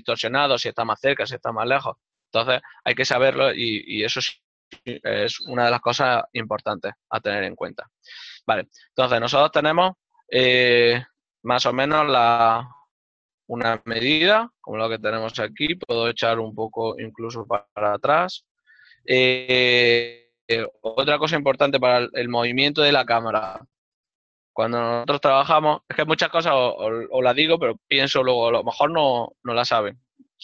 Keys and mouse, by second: 10.7 click, 12.0 ctrl+middle click, 28.7 middle click.